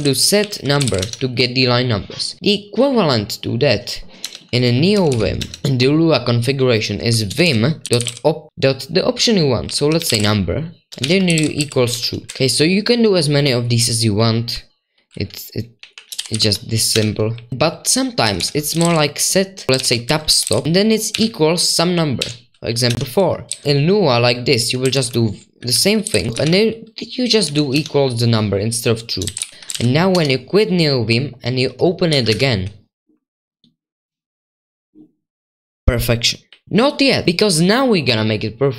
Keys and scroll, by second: 0.0-2.4 typing, 4.2-5.7 typing, 7.8-12.8 typing, 13.8-14.2 typing, 15.8-24.0 typing, 24.8 Escape, 25.5-26.4 typing, 27.4 typing, 29.2-30.1 typing, 32.0-33.9 typing, 36.2-37.2 typing.